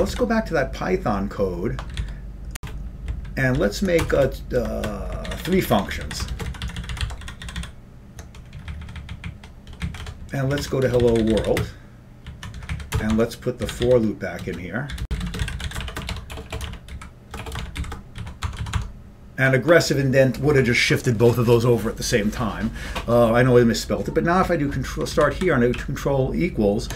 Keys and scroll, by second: 1.4 ctrl+=, 1.4 ctrl+g, 1.4 ctrl+x, 1.4 b, 3.8-4.6 typing, 6.8 ctrl+p, 6.8 ctrl+f, 6.8 ctrl+shift+space, 6.8 ctrl+n, 12.4 ctrl+n, 12.4 ctrl+w, 12.4 ctrl+y, 12.4 Up, 12.4 End, 12.4 Left, 12.4 typing, 12.9 Up, 16.0-16.7 typing, 19.7-20.4 typing, 26.0 ctrl+f, 26.0 ctrl+=.